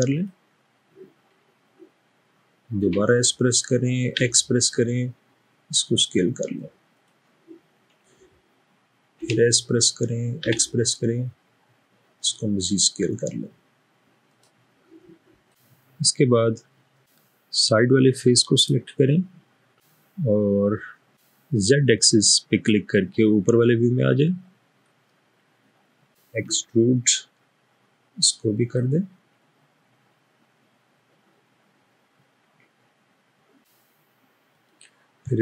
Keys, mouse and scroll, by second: 3.1 typing, 4.2 typing, 9.3 typing, 10.5 typing, 16.1-17.1 middle drag, 18.7 click, 26.6 e.